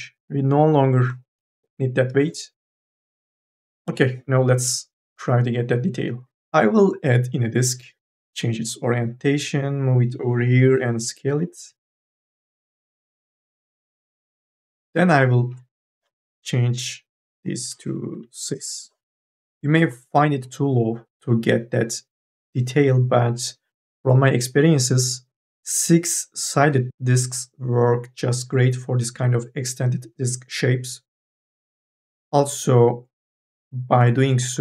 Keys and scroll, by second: 3.5 4, 3.7 e, 10.3 t, 11.5 e, 12.5 t, 14.1 e, 17.9 KP_6, 18.3 Return.